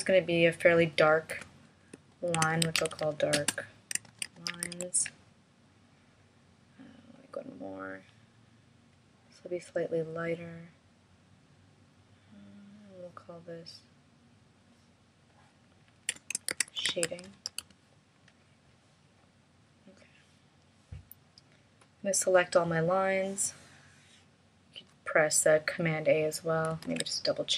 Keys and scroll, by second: 2.3 shift+d, 4.1 shift+l, 16.6 shift+s, 26.8 super+a.